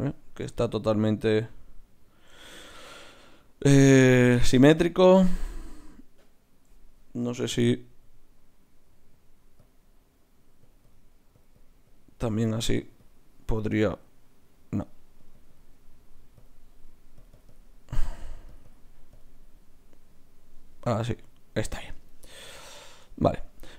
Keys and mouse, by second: 0.7-7.5 middle drag, 7.5 F6, 10.8-13.4 drag, 15.3-20.8 drag, 20.8 middle click.